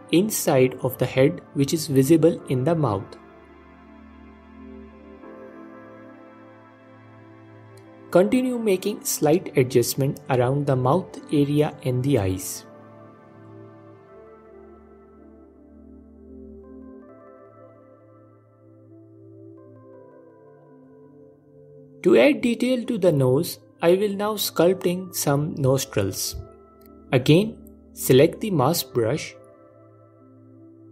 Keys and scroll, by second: 4.8 g, 5.3 alt+q, 5.8 f, 9.8 alt+q, 11.8 f, 20.2 ctrl+Tab, 24.3 ctrl+Tab, 26.1 f, 28.1 f.